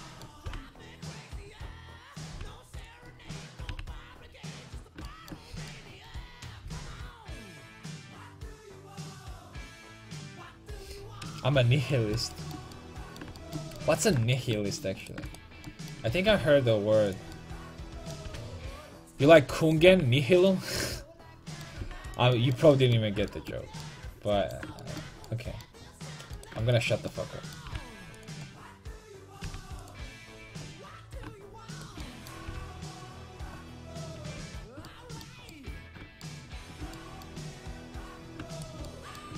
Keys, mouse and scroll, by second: 0.5 g, 1.3 click, 1.6 middle click, 2.4 g, 3.7 g, 12.0-13.2 middle drag, 13.6 middle click, 14.2 middle click, 15.1-17.1 right drag, 16.3 g, 17.2 click, 17.5 middle click, 18.3 g, 19.9 g, 21.8 g, 26.4 right click, 28.2 g, 29.5 g, 30.3 click, 32.5 g, 34.4 a, 38.0 right click, 39.0 right click.